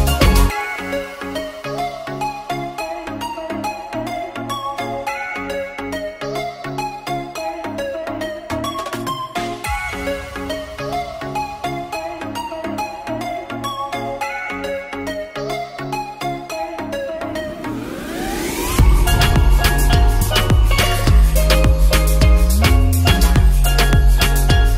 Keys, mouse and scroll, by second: 5.0 ctrl+s, 5.5-5.9 alt+drag, 6.2 click, 6.6 drag, 7.2 shift+a, 7.3 shift+click, 8.9-10.1 drag, 11.8 ctrl+s, 11.9 shift+middle click, 11.9 shift+a, 12.1 alt+middle click, 12.5 s, 13.7 middle click, 14.3 ctrl+s, 14.9-16.1 drag, 15.8 KP_0, 17.0 alt+shift+click, 17.6-18.8 drag, 18.6 KP_0, 20.3 ctrl+s, 23.7 click, 24.3 drag.